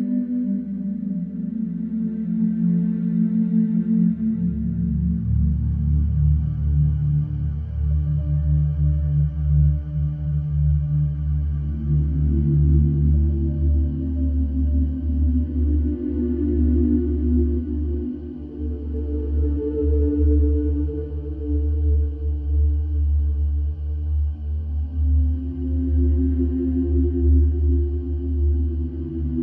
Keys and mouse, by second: 3.2 KP_7, 11.4 shift+click, 11.9 Delete, 13.1 click, 13.7 Delete, 15.2 shift+click, 15.7 Delete, 17.2 middle click, 17.7 shift+click, 18.0 Delete, 19.4 Delete, 20.9 KP_Decimal, 23.8 e, 25.9 Tab, 27.3-28.0 middle drag, 28.0 Tab.